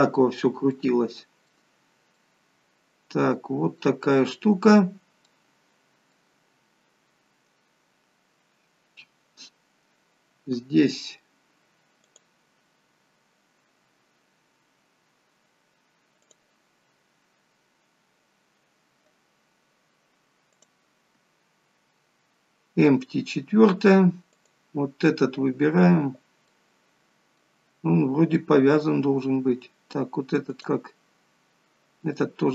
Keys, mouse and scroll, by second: 0.3-0.8 scroll down 2, 0.8 middle click, 5.3 middle click, 12.1 click, 20.5 click, 24.3 click, 26.5 middle click, 30.5 click, 32.1 middle click.